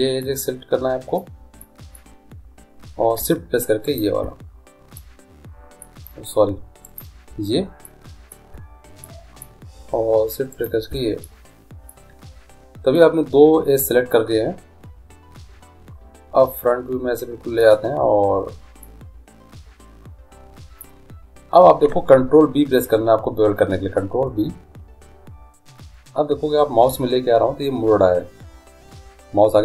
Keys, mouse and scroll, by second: 0.2-1.4 drag, 0.2-3.4 middle drag, 3.8-5.2 right drag, 5.0 middle click, 7.8 middle click, 10.5-12.4 middle drag, 14.4 middle click, 18.1 middle click, 24.2 ctrl+b.